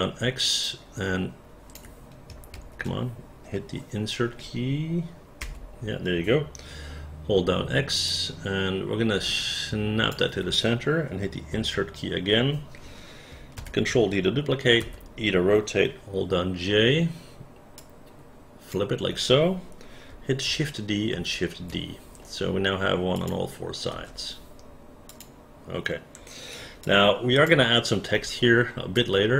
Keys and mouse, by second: 0.6-1.8 drag, 0.6 x, 2.5 ctrl+z, 5.4 Insert, 7.4 x, 8.1-10.1 drag, 11.6 Insert, 13.6 ctrl+d, 14.8 e, 16.9 j, 17.8 click, 20.5 shift+d, 21.1 shift+d, 23.2 click, 23.9 space, 25.1 click, 26.9 alt+click, 28.1 alt+middle click, 29.0-29.3 alt+drag.